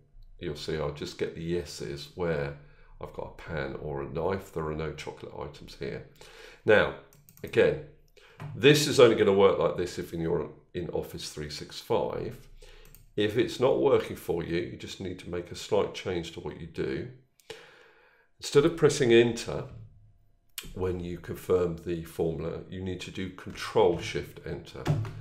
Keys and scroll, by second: 24.6 ctrl+shift+Return.